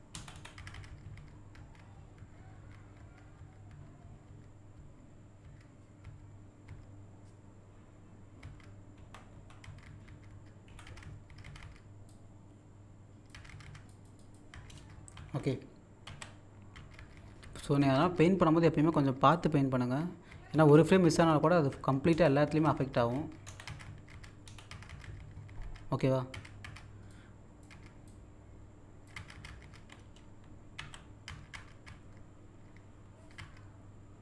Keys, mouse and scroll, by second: 0.1 Down, 9.0 Up, 10.7 Right, 12.1 click, 13.9 click, 16.0 z, 20.5 Up, 22.1 Down, 23.4 Left, 24.4 Down, 27.1 click, 28.1 click, 30.8 z.